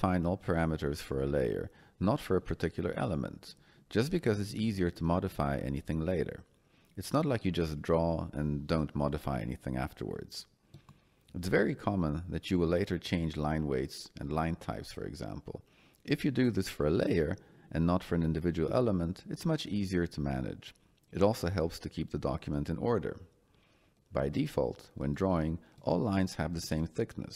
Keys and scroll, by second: 2.8 Escape.